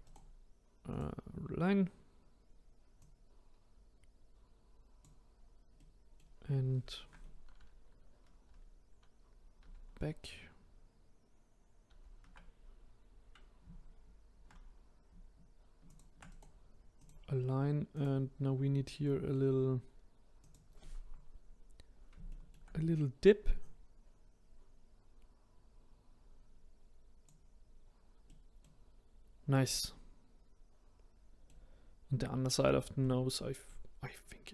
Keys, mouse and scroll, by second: 0.0-3.0 right drag, 3.0 click, 5.8 middle click, 6.5-7.4 scroll down 2, 8.2 ctrl+z, 9.6 ctrl+z, 15.9 shift+click, 16.3-17.9 right drag, 17.9 click, 18.5-19.0 scroll up 1, 19.0-20.4 middle drag, 20.4 click, 20.9-21.9 scroll up 2, 21.9-22.3 scroll down 1, 22.3-22.7 shift+middle drag, 22.7-23.4 scroll up 2, 23.6 click, 27.6-28.3 scroll up 2, 28.3-29.4 middle drag, 29.4-29.7 scroll down 1, 29.7-32.7 middle drag, 33.0-34.5 middle drag.